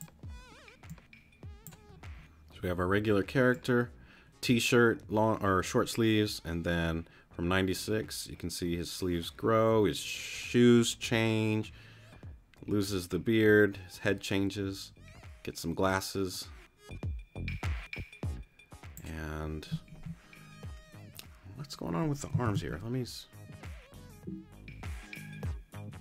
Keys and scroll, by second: 22.4 super+r.